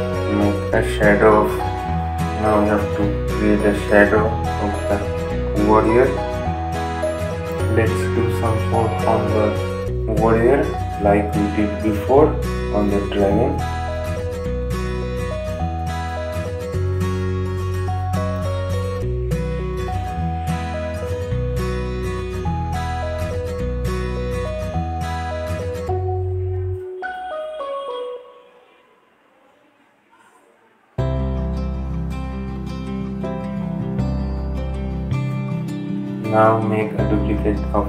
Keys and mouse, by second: 6.1 ctrl+z, 7.1-10.3 drag, 12.7 click, 14.8 right click, 15.0 click, 16.9 right click, 17.3-21.8 drag, 21.8 right click, 22.3 click, 24.1 right click, 24.3-25.9 drag, 25.9 click, 26.6 right click, 26.6 typing, 26.8 click, 29.4 right click, 29.7-32.2 drag, 32.4-35.2 drag.